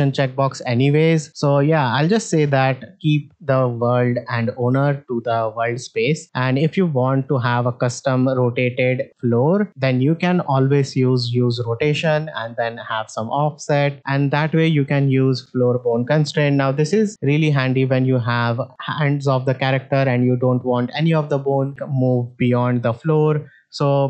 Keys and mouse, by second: 1.0-1.5 drag, 6.0 middle drag, 6.9 middle drag, 14.3 shift+middle drag, 16.0 alt+s, 17.0 middle drag.